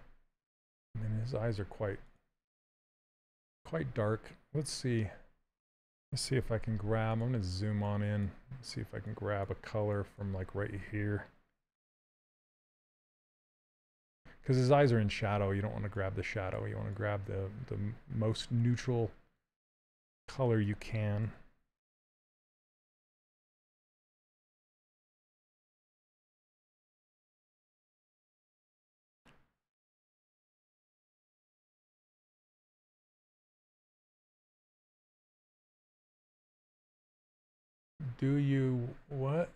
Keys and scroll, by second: 6.0 z, 14.0 c, 21.4 z.